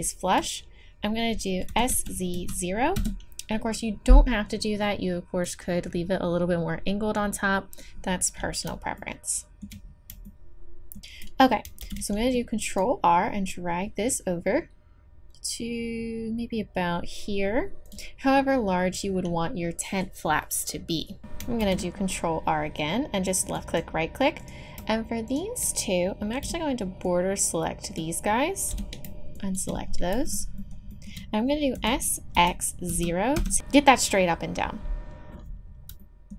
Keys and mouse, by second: 1.7 s, 4.6-8.0 drag, 8.0-11.8 middle drag, 11.8 ctrl+r, 11.8-13.4 drag, 21.6 ctrl+r, 24.4 click, 26.3-27.9 drag, 26.4 b, 28.7 b, 30.2-33.3 drag, 31.7 s.